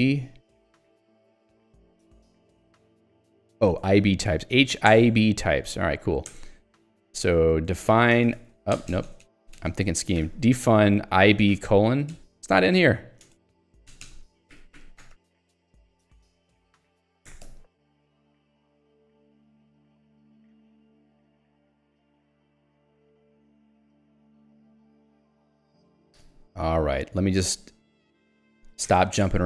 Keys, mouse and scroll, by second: 0.0-0.2 typing, 1.6 ctrl+k, 3.5 ctrl+j, 5.0 Return, 5.7 Escape, 6.4 Return, 7.1 ctrl+s, 7.5-8.9 typing, 10.0-12.1 typing, 13.2 space, 13.9 BackSpace, 14.5 ctrl+j, 15.1 ctrl+g, 15.3 ctrl+g, 15.5 Escape, 17.4 Return, 17.5 Escape, 25.2 click, 25.9 click, 26.3 Escape, 27.2-29.0 typing.